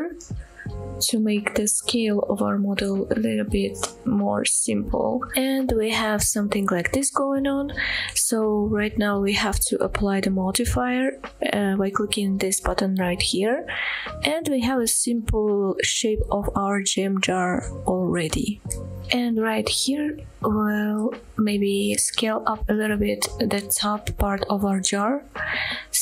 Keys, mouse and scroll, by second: 3.3 click, 4.9-5.2 scroll down 1, 5.2 middle click, 5.7-6.3 middle drag, 6.5-6.8 shift+middle drag, 6.9-7.4 middle drag, 7.5-8.1 middle drag, 8.3 middle drag, 9.0 shift+middle click, 9.1-9.6 scroll up 2, 10.1-11.5 drag, 11.9-12.2 scroll down 1, 12.3 shift+middle click, 12.6 middle click, 13.3 shift+middle click, 13.8 Tab, 14.3 middle click, 15.3-17.0 middle drag, 17.3 middle click, 17.8 scroll up 2, 17.9 middle click, 18.5 click, 18.7 click, 19.8 s, 20.9 right click, 21.8 shift+click, 22.0 shift+click, 22.4 s, 25.7 click.